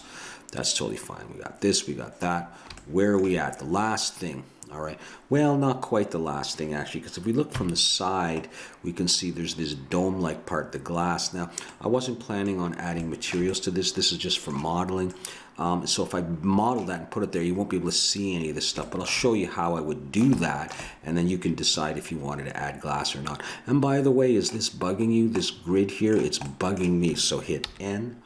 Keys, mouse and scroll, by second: 1.7-2.3 scroll up 1, 4.2 middle click, 6.0 middle click, 7.5 KP_3, 10.9-12.0 middle drag, 21.2 middle click, 22.0-23.0 middle drag, 25.1-27.4 middle drag, 27.6 n.